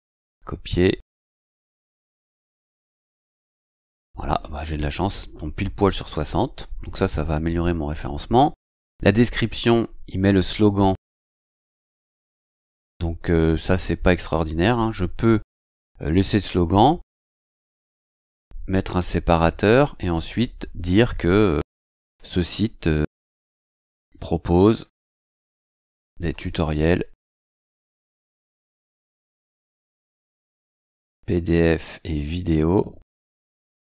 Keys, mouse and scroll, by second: 0.4 ctrl+c, 1.1 click, 2.1 BackSpace, 2.9 ctrl+v, 7.6 scroll down 2, 9.8 scroll up 2, 12.2 scroll down 2, 14.0 click, 18.2 click, 23.2-29.7 typing, 31.0-33.8 typing.